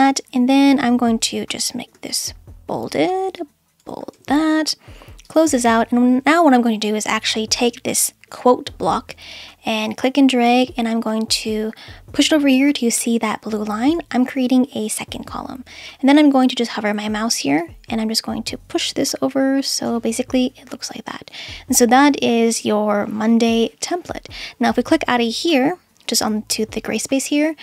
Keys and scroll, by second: 2.1 super+b, 4.1 super+b.